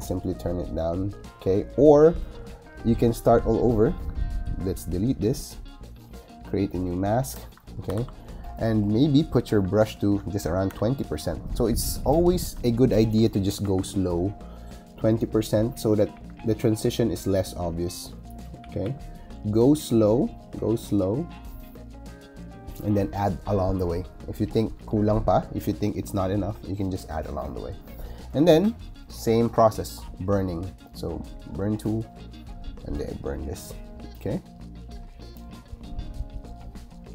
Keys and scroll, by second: 7.8 super+i, 9.4 b, 10.6 2, 12.3 2, 13.5 ], 16.0 [, 18.5 [.